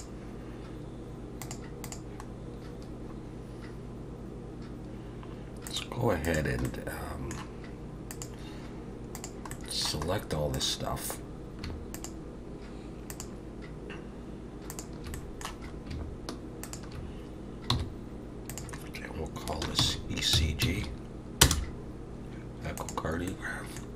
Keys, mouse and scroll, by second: 2.4-2.9 scroll down 2, 5.7 click, 6.3 click, 6.7 middle click, 8.1 click, 9.5 middle click, 10.1-10.6 scroll up 2, 10.6 click, 11.2-11.8 scroll up 3, 11.9 shift+click, 13.1 click, 14.7 shift+click, 15.1 middle click, 15.7 scroll up 1, 16.6 shift+click, 17.7 m, 23.3 middle click.